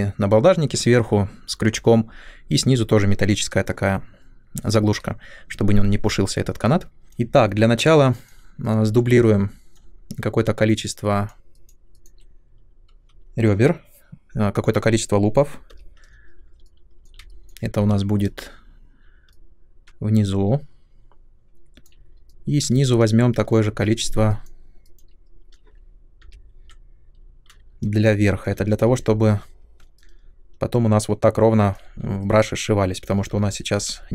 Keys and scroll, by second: 7.0 alt+F9, 15.7 |, 17.7 w, 22.8 space, 26.2 |, 29.0 w.